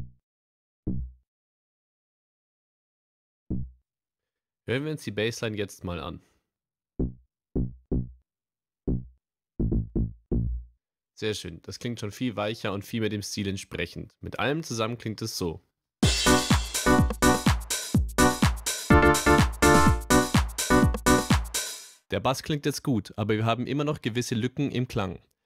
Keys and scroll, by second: 6.9 space, 10.8 space, 16.0 space, 21.7 space.